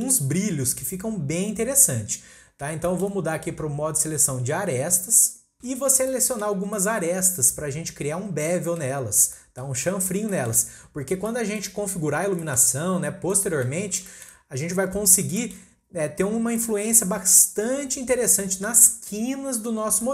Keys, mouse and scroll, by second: 0.8-1.8 scroll up 1, 1.8-2.9 scroll up 1, 2.9-5.8 shift+middle drag, 5.8 scroll down 2, 6.0 scroll up 1, 6.1-9.1 middle drag, 9.1 scroll up 2, 9.3-9.9 middle drag, 9.9-10.3 scroll up 1, 10.3-10.7 shift+middle drag, 10.7-11.3 scroll down 5, 11.3-14.4 middle drag, 14.4-15.1 scroll up 1, 15.1-15.4 scroll down 1, 15.4 shift+middle click, 15.5-16.0 scroll up 1, 16.0-16.5 scroll up 2, 16.5-19.0 middle drag, 19.0-19.9 scroll up 1, 19.9 scroll down 1, 20.0 middle click.